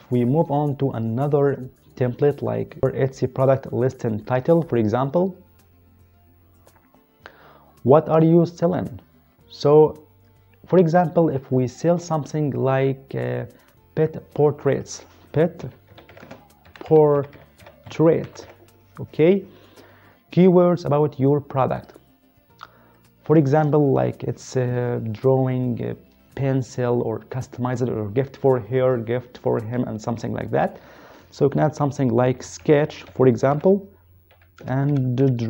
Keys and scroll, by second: 15.6-18.5 typing, 32.4-35.4 typing.